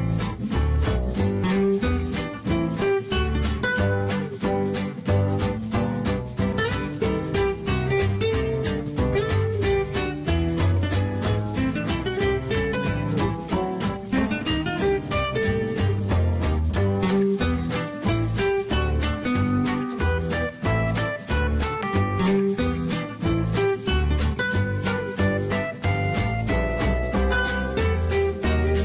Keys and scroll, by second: 16.3-17.6 typing.